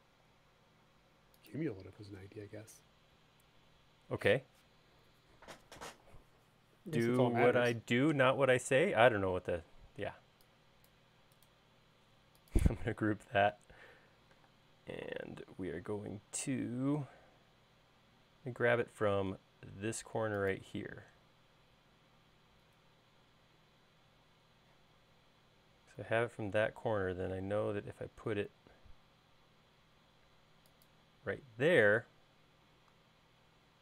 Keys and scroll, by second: 2.7 space, 15.1 m, 32.5 l.